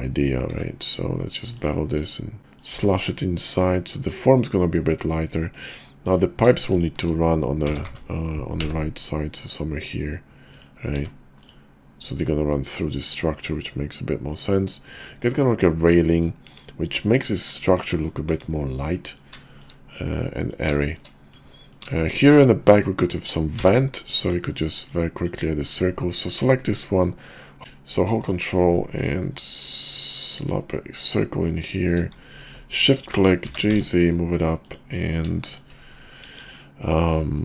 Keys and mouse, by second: 2.4 click, 2.4 right click, 2.5 middle click, 3.4-5.6 middle drag, 7.6 g, 11.4 click, 12.0-16.2 middle drag, 16.5 KP_5, 17.1 middle click, 18.3 KP_5, 18.6 middle click, 19.4 shift+middle click, 20.0 middle click, 21.0 shift+middle click, 21.5 middle click, 21.9 shift+middle click, 22.3 middle drag, 23.6 d, 24.8-25.4 drag, 28.1-32.6 ctrl+drag, 33.4 g, 35.4 shift+middle click, 36.2 KP_5.